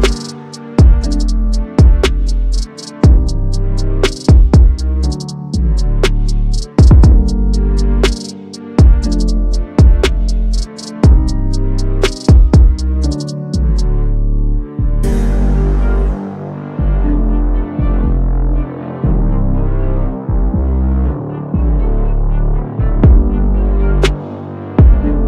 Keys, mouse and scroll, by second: 5.2 Caps_Lock, 5.2 click, 8.1 Caps_Lock, 8.1 click, 9.7-11.8 typing, 13.3 typing, 20.1 Caps_Lock, 20.1 click, 22.6 Caps_Lock, 22.6 click.